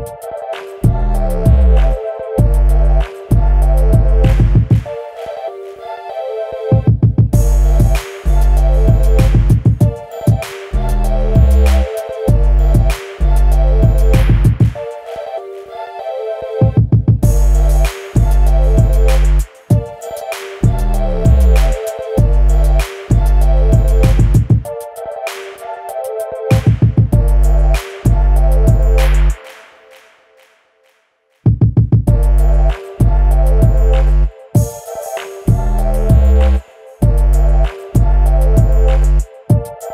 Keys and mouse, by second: 0.3 ctrl+a, 2.2 drag, 3.2 click, 4.4 click, 5.8 click, 5.9 click, 6.1 click, 6.9 click, 7.3 click, 8.6 shift+a, 11.4 click, 12.4 click, 12.7 click, 13.1-15.2 drag, 16.1 click, 16.8 r, 18.8 click, 19.8-20.3 middle drag, 21.1-22.7 drag, 23.5 click, 23.8 Tab, 24.1 middle click, 25.7 click, 26.6 Delete, 28.0 middle click, 29.1 click, 29.7 middle drag, 33.2 alt+h, 34.9 middle drag, 37.4 middle click, 37.9 h, 38.7 click, 38.9 h, 39.5-39.9 middle drag.